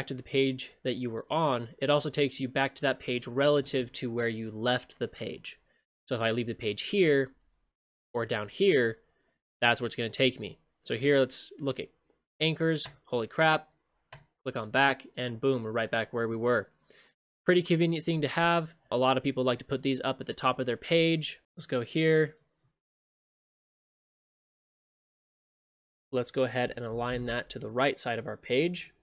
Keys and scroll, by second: 21.4 ctrl+shift+space.